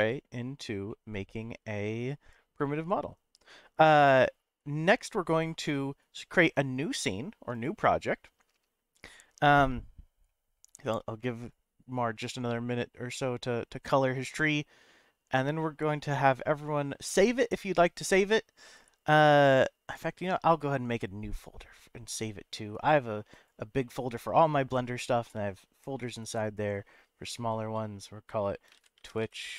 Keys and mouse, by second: 0.0 click, 0.9-3.5 middle drag, 7.5-20.1 drag.